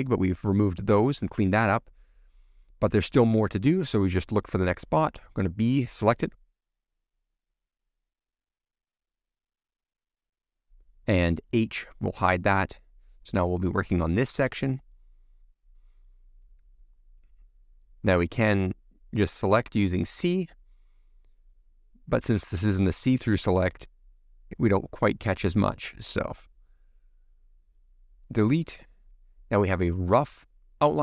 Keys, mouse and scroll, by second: 0.6-1.1 scroll down 5, 1.2 middle click, 1.9 scroll up 1, 2.5 click, 2.7 middle click, 3.6 click, 5.7 b, 7.9 click, 8.5-10.0 middle drag, 10.8 h, 12.0 click, 13.0 click, 13.3-14.3 middle drag, 14.5 scroll up 3, 14.6-16.3 middle drag, 16.3 scroll down 1, 16.4 middle click, 17.1-19.3 shift+middle drag, 23.8 middle click, 24.5 shift+middle click, 25.3 click, 25.4 middle click, 27.8 middle click, 28.5 click, 28.6 middle click, 29.7 x, 29.8-31.0 middle drag.